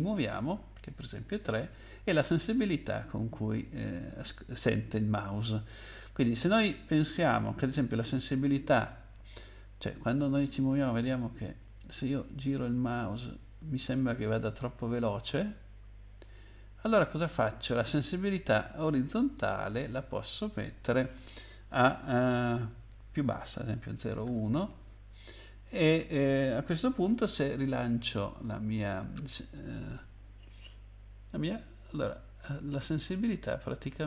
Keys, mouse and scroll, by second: 0.9 click, 2.1 click, 2.3 click, 7.1 click, 9.9 click, 16.9 click, 19.3 click, 24.0 BackSpace, 24.2 1, 28.8 click.